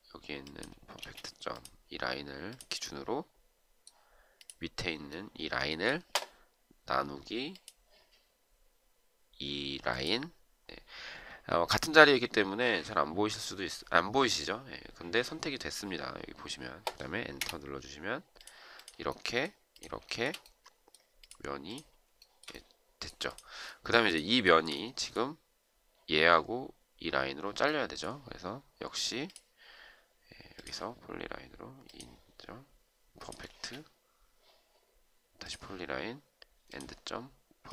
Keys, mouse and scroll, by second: 1.0 space, 17.2 Return, 20.0 shift+right click, 20.2 shift+double right click, 22.2 shift+right click, 24.4 shift+right click, 24.6 shift+double right click, 33.4 space.